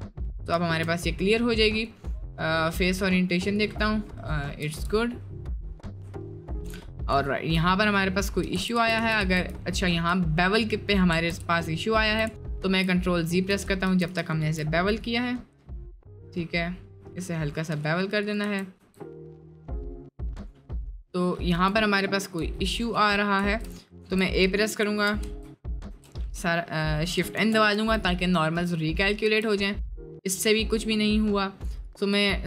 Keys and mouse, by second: 0.6 shift+middle drag, 1.8-4.0 drag, 4.1 middle click, 4.5 shift+middle click, 4.8 Tab, 6.2 alt+click, 7.2 shift+middle click, 7.9 middle click, 8.5-13.5 ctrl+z, 18.5 Tab, 21.5 1, 22.0 click, 22.4 h, 23.3 ctrl+z, 23.9 a, 24.8 shift+n, 25.3 Tab, 25.6 middle click, 26.3 middle click, 27.3 shift+n, 27.7 Tab, 28.3 middle click, 28.8 middle click, 30.6 click, 32.3 shift+middle click.